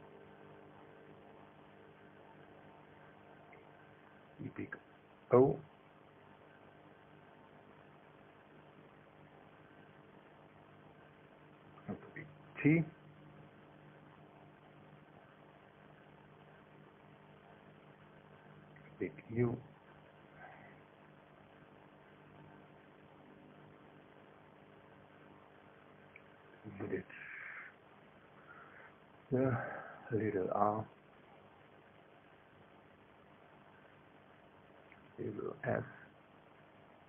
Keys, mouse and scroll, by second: 0.0-2.5 typing, 2.8 KP_Enter, 4.4 space, 5.1 click, 6.3 click, 8.1 click, 9.3 KP_0, 9.5 KP_Decimal, 9.7 KP_0, 10.0 KP_1, 10.2 KP_Enter, 11.9 space, 12.8 click, 14.1-15.6 drag, 16.2 KP_0, 16.5 KP_Decimal, 16.6 KP_0, 16.9 KP_1, 17.1 KP_Enter, 21.0 space, 21.6 click, 23.4 click, 26.2 click, 27.1 KP_0, 27.3 KP_Decimal, 27.5 KP_0, 27.7 KP_1, 28.0 KP_Enter, 29.5 space, 30.1 click, 31.5 click, 32.7 click, 33.6 KP_0, 33.8 KP_Decimal, 34.1 KP_0, 34.2 KP_1, 34.5 KP_Enter, 36.7 space.